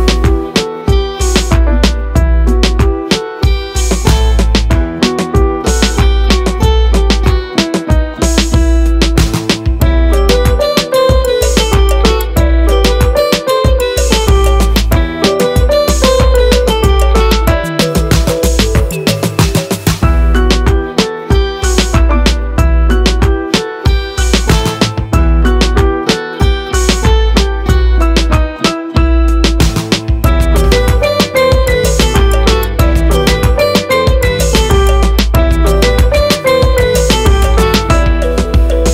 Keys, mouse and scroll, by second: 0.5 s, 4.6 shift+a, 9.7-13.4 drag, 13.4 s, 14.7 scroll up 4, 14.8 s, 16.3 click, 19.3 shift+d, 20.8 click, 23.2 click, 24.3 shift+d, 25.2 click, 27.2 click, 29.0 KP_1, 31.5-33.7 scroll up 3, 34.1 click, 34.9 shift+d, 36.2 click, 38.4 r.